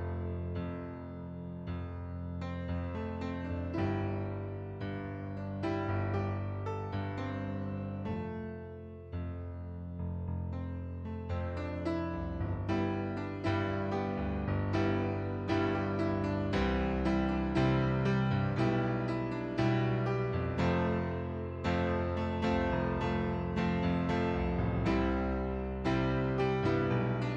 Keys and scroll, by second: 0.3 ctrl+d, 7.1 ctrl+z, 7.5 ctrl+z, 8.7 ctrl+d, 20.0 ctrl+d, 20.6 ctrl+d, 21.1 ctrl+d.